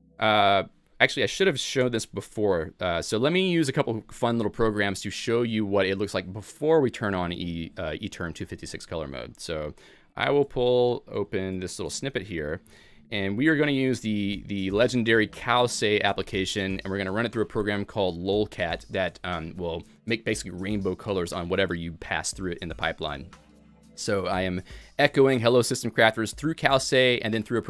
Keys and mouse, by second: 0.1 Escape, 1.0 alt+x, 1.0 Return, 1.0 click, 1.0 y, 1.8 Return, 3.6-6.0 typing, 3.9 click, 5.5 click, 14.6-15.9 typing, 14.9 click, 18.2-20.6 typing, 18.5 click, 20.1 click, 22.4 shift+Insert, 23.5-27.3 typing, 23.8 click, 25.2 click, 26.8 click.